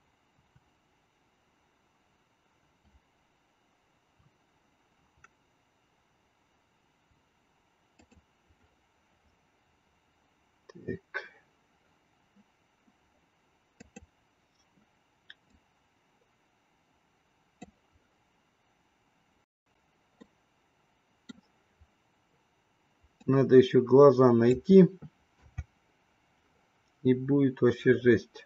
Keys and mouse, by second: 15.6-17.9 drag, 20.3-21.6 middle drag, 23.2-24.5 drag, 25.4 KP_0.